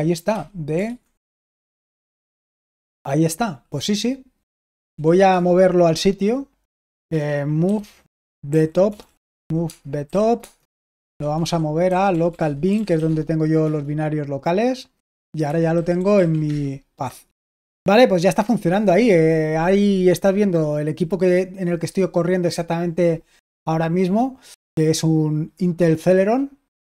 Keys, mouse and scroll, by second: 0.6-1.7 typing, 1.8 Return, 4.5-5.3 typing, 7.4-14.1 typing, 15.2-16.6 typing.